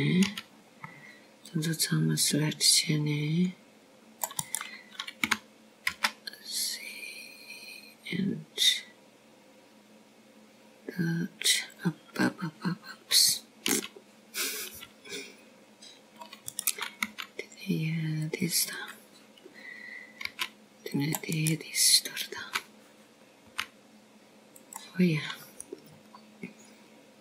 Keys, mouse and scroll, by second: 1.4 middle click, 2.0 click, 3.1 c, 8.1 g, 15.1 click, 16.6 c, 20.0 g, 21.7 click, 23.1 c, 24.3 right click, 26.4 g.